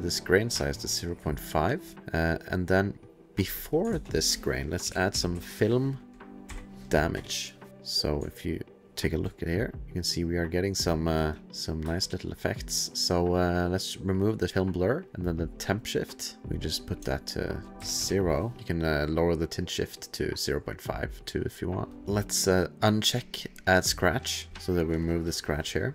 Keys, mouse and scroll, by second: 1.9 ctrl+s, 1.9 ctrl+click, 2.2 click, 3.4 click, 3.6 click, 3.7 click, 3.9-5.8 typing, 6.4 Up, 7.1 Return, 8.1 click, 8.7 shift+click, 9.4 click, 10.0 click, 10.8 click, 11.2 click, 11.3 click, 11.4 shift+space, 11.8 shift+space, 12.3 click, 13.9 click, 15.8 click, 17.0 ctrl+click, 17.5 click, 17.7 ctrl+a, 17.7 click, 17.8 KP_0, 18.0 KP_Enter, 18.6 ctrl+z, 18.6 click, 18.7 click, 21.9 ctrl+z, 24.5 click, 25.0 click.